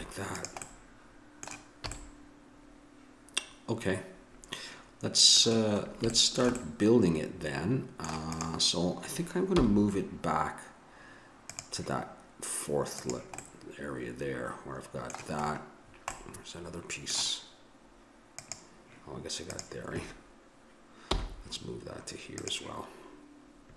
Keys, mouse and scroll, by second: 1.9 a, 2.1-3.9 middle drag, 6.1-8.3 middle drag, 8.3-10.1 drag, 9.5 m, 13.1 click, 13.4-18.4 middle drag, 18.4-21.2 drag, 21.1 m.